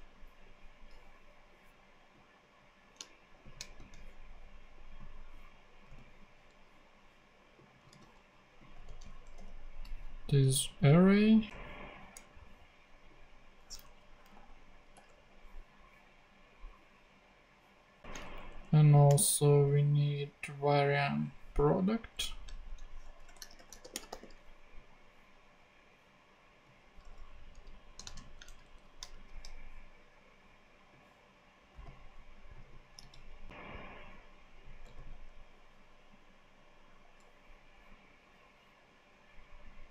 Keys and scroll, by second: 0.8 Return, 3.7 shift+super+x, 4.6 super+x, 5.9 super+v, 8.7 super+v, 9.3 super+[, 9.8 [, 11.4 super+Tab, 13.8 Down, 14.3 ;, 14.9 Return, 18.0 super+Left, 18.2 shift+super+Down, 19.0 shift+super+Down, 19.1 shift+super+d, 20.1 super+d, 22.6 alt+shift+Right, 23.2-24.6 typing, 27.5 Left, 28.1 shift+super+Left, 28.4 shift+super+Down, 29.0 shift+super+Down, 29.1 shift+super+x, 30.0 super+x, 33.0 super+c.